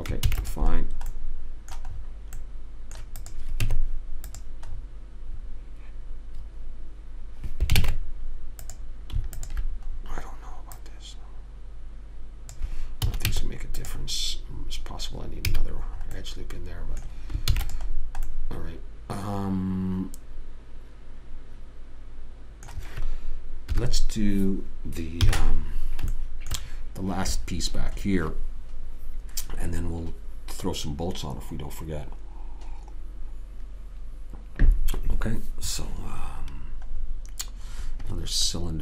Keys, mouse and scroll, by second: 0.6 ctrl+s, 1.1-3.3 middle drag, 3.6 click, 3.9 Tab, 5.1 middle click, 8.1 ctrl+Tab, 9.7 click, 10.2-11.3 right drag, 13.4 a, 13.6 Tab, 15.9 a, 17.8 ctrl+s, 24.0 KP_1, 25.5 KP_3, 26.6 middle click, 37.3 middle click, 37.5 middle click, 38.0-38.8 middle drag.